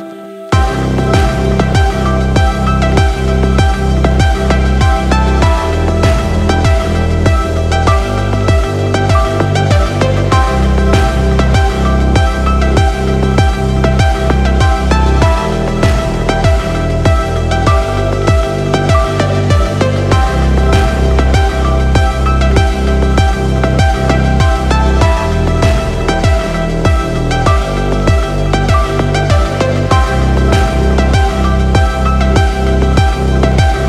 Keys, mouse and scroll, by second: 0.5 click, 2.9 shift+a, 7.4 click, 7.6-9.7 drag, 12.3-12.7 scroll up 1, 12.9-14.3 drag, 15.4-16.0 scroll down 3, 17.2 click, 21.9-23.3 drag, 27.3 click, 28.3-28.8 scroll down 4, 28.8-30.3 scroll up 4, 30.3 g, 32.6 right click.